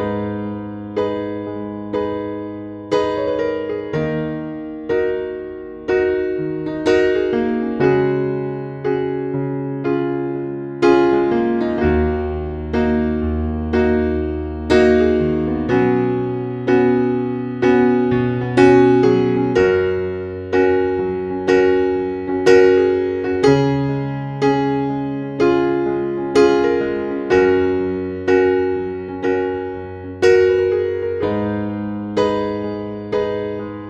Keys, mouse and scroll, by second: 2.7 scroll up 1, 3.6-5.6 drag, 5.6 scroll down 1, 6.7 click, 7.0-7.5 scroll down 1, 7.5 scroll up 1, 9.2 click, 13.6 scroll down 1, 14.5 click, 20.9 scroll up 1, 24.0-24.5 scroll down 1, 24.5 scroll up 1, 27.8 click.